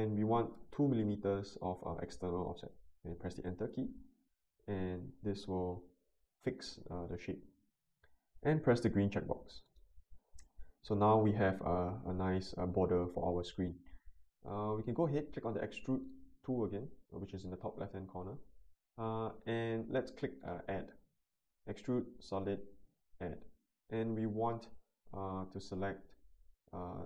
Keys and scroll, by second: 0.5 2, 3.6 Return.